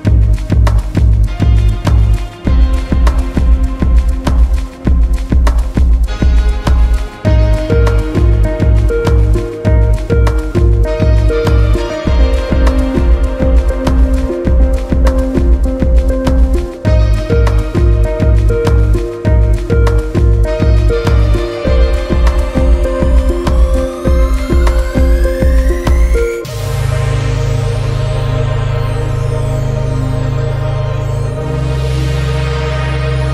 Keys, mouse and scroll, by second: 0.0 Tab, 0.7 click, 2.7 click, 3.0-3.8 scroll down 5, 3.8-4.2 shift+middle drag, 4.2-6.7 scroll down 2, 8.1-9.4 scroll up 2, 9.4-10.5 scroll up 1, 10.9-12.5 scroll up 4, 12.5-13.5 shift+middle drag, 13.5-14.2 scroll up 4, 14.2 click, 15.2 alt+z, 17.0 click, 18.1 s, 19.9-20.7 scroll down 1, 20.7-23.1 shift+middle drag, 24.1-26.5 middle drag, 28.6 KP_1, 31.3 Tab, 32.2 a, 32.7 a.